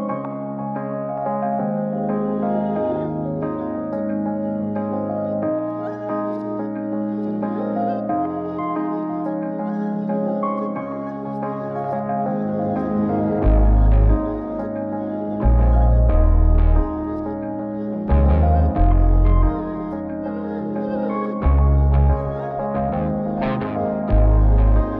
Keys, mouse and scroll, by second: 11.1 middle click, 11.9-12.3 drag, 13.5 ctrl+c, 18.2 click, 18.9 ctrl+v, 21.4-22.3 middle drag, 24.6 click.